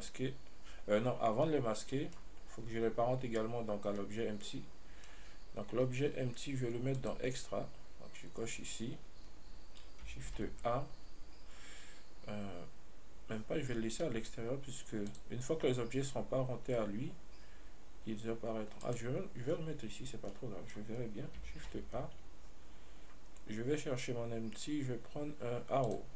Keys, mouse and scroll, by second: 1.7-7.2 middle drag, 7.2 click, 10.5 shift+a, 15.3 click, 19.1 click, 20.6-21.9 middle drag, 21.9 shift+a.